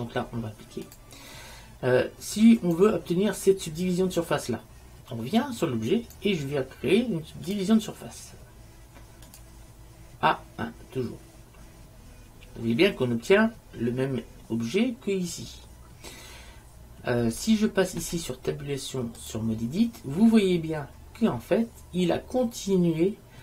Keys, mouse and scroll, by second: 1.0 click, 2.4 click, 2.4-4.6 right drag, 6.0-7.9 right drag, 7.6-9.4 drag, 18.1 Tab, 21.7-23.4 middle drag.